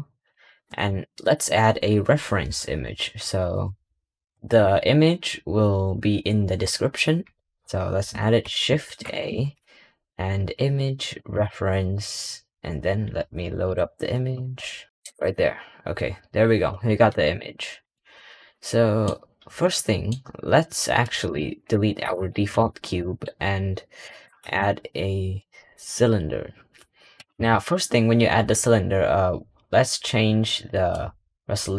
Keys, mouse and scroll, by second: 0.3-1.9 scroll up 6, 1.9-4.6 scroll down 1, 4.6-4.9 scroll down 1, 8.7 shift+a, 15.2-16.1 scroll down 1, 16.1-16.5 scroll down 1, 16.5-17.2 scroll up 7, 17.2-17.8 scroll down 3, 17.8-21.1 middle drag, 21.1 click, 21.9 Delete, 22.2-23.1 middle drag, 23.1-23.4 scroll up 2, 23.7 scroll down 1, 24.1 middle click, 24.3 shift+a.